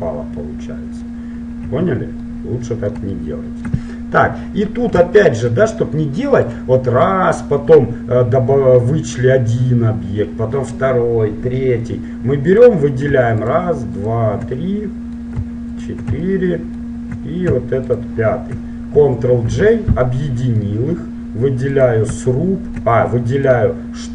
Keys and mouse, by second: 0.0-1.8 middle drag, 0.0 right click, 1.8 z, 6.6-8.6 right drag, 12.6-14.8 right drag, 14.8 middle click, 15.5 right click, 15.8 middle click, 16.0 right click, 16.6-17.7 drag, 16.6-17.8 middle drag, 18.0-19.6 drag, 18.0-20.2 middle drag, 19.6 ctrl+j, 21.8 click, 21.8-24.1 middle drag.